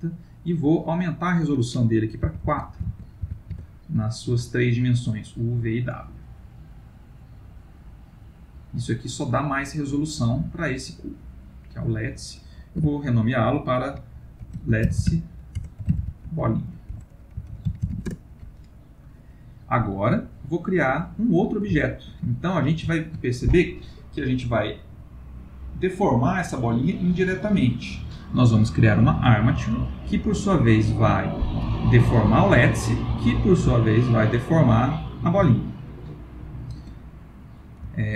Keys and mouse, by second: 0.9 click, 6.2 middle click, 6.3 middle click, 12.7 F2, 15.0 t, 19.8-20.3 middle click, 20.0 middle click, 21.8 ctrl+middle click, 22.3 shift+middle click, 23.0 ctrl+middle click, 30.9 click, 32.0 g, 34.2 click, 34.6 g, 36.0 middle click, 36.6 ctrl+middle click, 37.1 middle click, 37.9 ctrl+middle click.